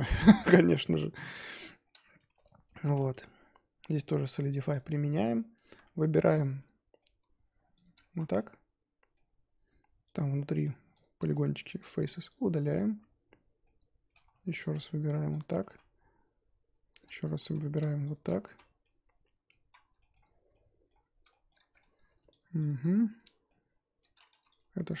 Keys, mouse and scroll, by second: 0.2-0.7 scroll up 2, 0.8-1.8 middle drag, 1.8-2.2 scroll down 2, 2.2 Tab, 2.6-3.0 shift+middle drag, 3.0 Tab, 4.7 click, 5.0 Tab, 5.1-6.4 middle drag, 6.4 alt+click, 6.6-7.8 middle drag, 7.8 alt+shift+click, 8.1 z, 8.3-9.2 middle drag, 9.2-10.1 scroll up 2, 10.1 click, 11.0 shift+click, 11.3-12.3 middle drag, 12.3 x, 12.6-14.7 middle drag, 14.7 z, 15.4 alt+click, 15.7 z, 17.5 z, 18.1 alt+shift+click, 18.5 z, 18.8 middle click, 19.6 z, 20.0 shift+middle drag, 20.2-20.5 scroll up 2, 20.5-21.0 middle drag, 21.0 scroll up 2, 21.3 shift+middle drag, 21.6 scroll up 2, 22.4 shift+click, 22.6 shift+click, 22.9-23.4 scroll down 1, 23.4-24.5 middle drag, 24.5 click.